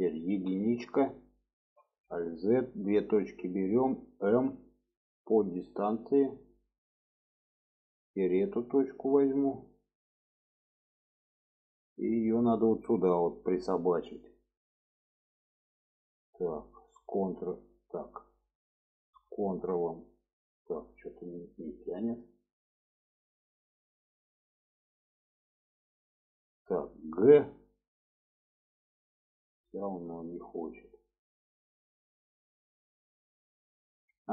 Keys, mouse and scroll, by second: 0.3 1, 1.8 alt+z, 2.4 click, 3.2 alt+z, 4.6 m, 7.1 click, 8.0 click, 8.5 middle click, 10.0-11.0 middle drag, 11.6-12.0 shift+middle drag, 16.7-17.7 ctrl+drag, 18.2-20.3 drag, 20.8-22.1 middle drag, 22.3-24.4 middle drag, 27.2 g, 29.2-31.9 middle drag, 32.2-33.9 middle drag.